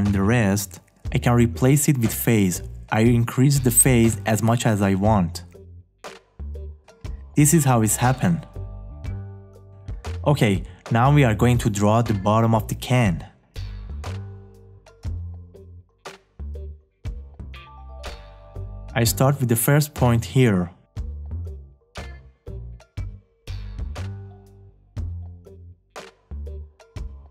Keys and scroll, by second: 18.0 `.